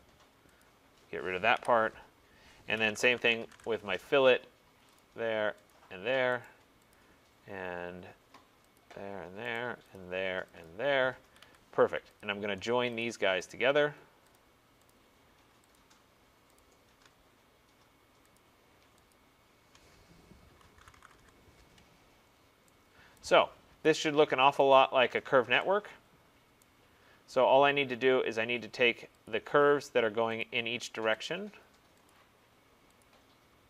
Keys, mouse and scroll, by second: 0.7 click, 1.6 Delete, 2.6-3.6 typing, 5.0 click, 5.8 click, 6.5 right click, 7.0 click, 8.9 click, 9.6 right click, 10.1 click, 10.7 click, 11.3 Escape, 11.5 Escape, 12.3 click, 13.1 shift+click, 13.6 shift+click, 14.4 click, 15.0 click, 15.8 click, 17.3 click, 17.3 middle click, 17.4 middle click, 17.7 middle click, 18.4 shift+click, 19.2 shift+click, 20.7-21.2 typing, 21.2-21.9 scroll, 21.9-23.2 scroll, 23.2 right click, 23.2 scroll, 23.8 Escape, 23.8-24.6 scroll, 24.6 click, 24.8 click, 25.1-25.8 scroll, 25.8 scroll, 26.7 right click, 26.9-28.0 scroll, 28.0 middle click, 28.0 middle click, 29.3 click, 30.5 shift+click, 31.3 click, 32.2 click, 33.1 shift+click.